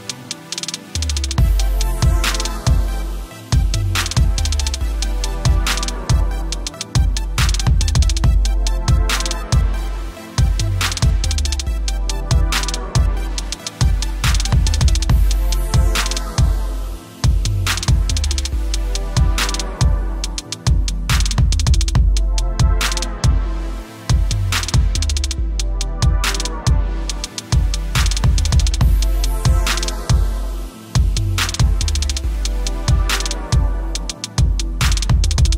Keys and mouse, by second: 0.0 click, 2.4 b, 4.7-5.0 typing, 7.8 typing, 10.0 v, 10.2 click, 10.5 t, 11.0 alt+click, 11.5 click, 12.0 right click, 12.1 click, 12.6 Return, 13.0 l, 15.2 click, 17.8 Escape, 19.8 click, 20.9 l, 22.4 click, 24.7 Return, 26.3 click, 26.8 typing, 27.8 typing, 30.0-31.0 typing, 31.1 click, 34.1 v, 34.4 ctrl+-, 34.7 space, 34.8 click, 35.0 v, 35.4 click.